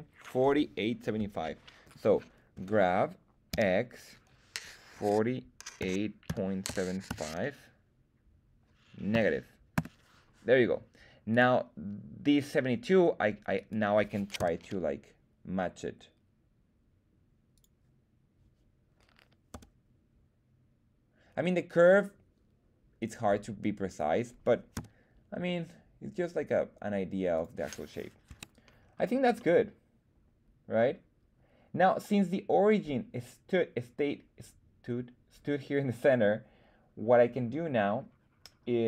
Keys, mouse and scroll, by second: 2.5 g, 3.5 x, 4.9-7.0 typing, 9.1 KP_Subtract, 9.7 Return, 11.3 right click, 13.5 click, 13.5 right click, 14.3 g, 17.5 right click, 17.5 click, 19.5 g, 21.8 click, 22.9 click, 22.9 right click, 23.9 click, 23.9 right click, 24.7 g, 27.3 click, 28.2 Tab, 28.8-29.3 scroll down 1, 29.3 scroll down 1, 29.3-31.7 middle drag.